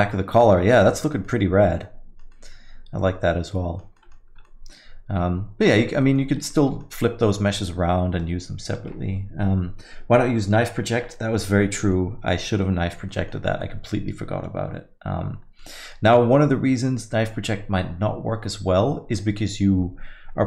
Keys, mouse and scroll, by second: 0.2 scroll up 2, 0.5 alt+middle click, 1.0 alt+middle click, 1.3 alt+middle click, 2.3 alt+middle click, 4.0 middle click, 4.3 scroll down 1, 4.5 alt+middle click, 6.0 middle click, 6.3 scroll down 1, 6.5 alt+middle click, 7.4 alt+middle click, 12.0 middle click, 13.1 middle click, 13.4 scroll down 1, 13.6 alt+middle click, 13.8 alt+middle click, 15.6 middle click.